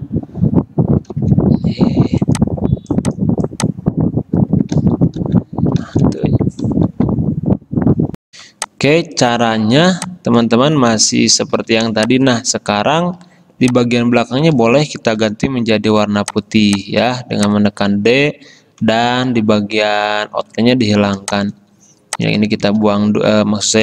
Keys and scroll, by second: 1.3 ctrl+f, 4.9 ctrl+f, 6.0 ctrl+z, 6.9 ctrl+z, 8.6 space, 10.0 space, 12.0 space, 14.6 ctrl+z, 15.3 d, 21.4 space, 23.2 z.